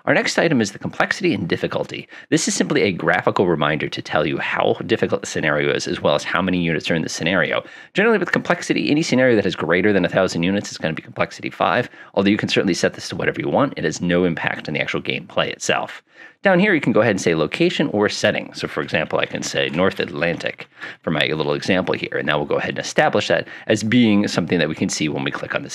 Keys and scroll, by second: 0.0-0.1 typing, 18.9-21.4 typing.